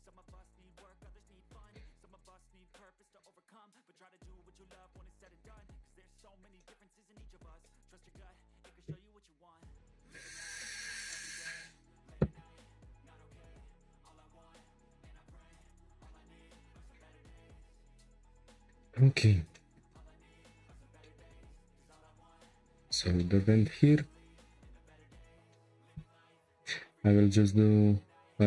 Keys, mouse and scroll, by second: 4.3 Tab, 4.6 scroll down 1, 4.9-6.0 shift+middle drag, 6.0 scroll down 2, 6.3-8.2 shift+middle drag, 8.2-10.5 scroll up 1, 10.5-11.1 scroll down 5, 11.1-11.8 middle drag, 11.8-13.3 scroll up 7, 13.3 scroll up 1, 13.4-13.8 shift+middle drag, 13.8-14.2 scroll down 2, 14.2-16.3 shift+middle drag, 16.3 scroll up 2, 18.2 scroll down 3, 18.4-20.3 shift+middle drag, 20.3 scroll up 2, 21.0-21.7 shift+middle drag, 21.7 scroll up 3, 22.1 click, 22.6 Tab, 23.2-23.7 shift+middle drag, 23.7 3, 24.1 click, 24.5 shift+click, 24.9 shift+click, 25.5-26.4 middle drag, 26.4 i.